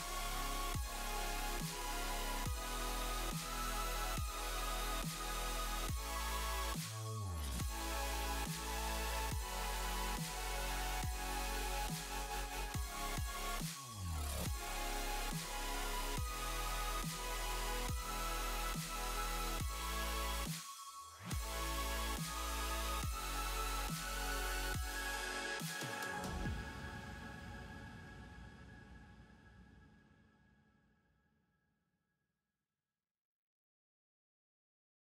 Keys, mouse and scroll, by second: 1.7 click, 1.8 space, 3.1 click, 3.1 h, 3.4 ctrl+z, 3.5 click, 3.8 click, 3.9 h, 5.2 space, 5.3 click, 5.3 click, 5.4 click, 5.5 space.